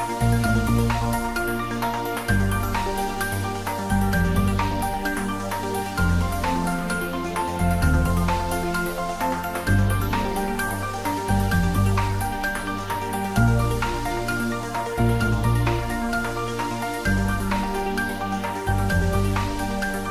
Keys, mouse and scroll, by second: 3.0 scroll down 1, 3.4 middle click, 4.6 Tab, 4.9-5.4 scroll up 1, 6.2 click, 8.5 2, 8.8 click, 10.1 ctrl+b, 13.1-14.1 scroll up 1, 14.9-17.4 scroll down 1, 20.0 click.